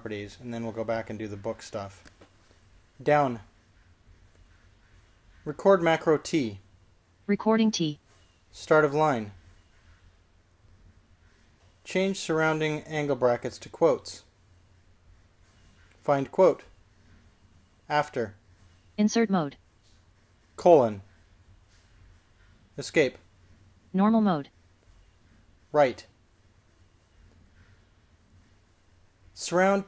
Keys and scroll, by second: 4.1 j, 7.3 typing, 10.1 ^, 15.1 typing, 17.2-17.9 typing, 19.0 a, 22.0 shift+;, 24.1 Escape, 26.8 l.